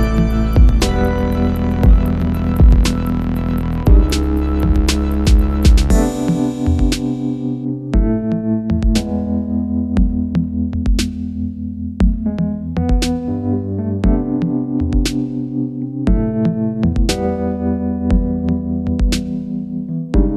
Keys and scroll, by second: 0.1 Tab, 6.8 alt+super+k, 6.8 BackSpace, 13.5 alt+super+k, 18.8 alt+super+k.